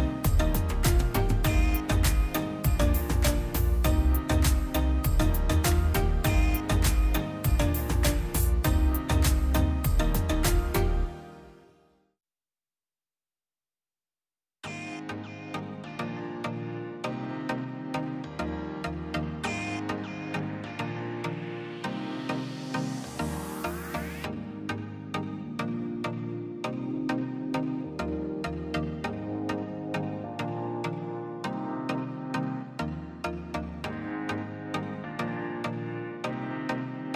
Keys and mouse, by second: 0.0 middle click, 0.6 click, 1.0 click, 1.3 shift+d, 1.8-2.2 middle drag, 2.2 drag, 2.6 middle click, 2.9 middle drag, 3.2 drag, 4.1 drag, 4.4 click, 4.7 middle click, 4.9 middle drag, 5.3 middle click, 5.7 middle click, 6.0 click, 7.3-8.8 drag, 11.3-11.7 drag, 12.2-13.1 drag, 13.6 click, 14.8-15.6 drag, 15.8 ctrl+shift+drag, 16.2-17.0 drag, 17.4-18.2 drag, 19.1 middle click, 19.3 click, 19.7-20.6 typing, 20.9 middle click, 21.4 middle click, 22.0 middle click, 22.6 middle click, 22.9 click, 23.8 middle click, 23.9 middle click, 24.3 click, 25.4 click, 25.9 middle click, 26.1 middle click, 27.2 middle click, 27.4-28.8 middle drag, 28.8 click, 30.0 shift+d, 31.1 middle click, 31.5 click, 32.1-33.6 drag, 35.9-36.6 drag, 36.6 BackSpace, 36.9 BackSpace.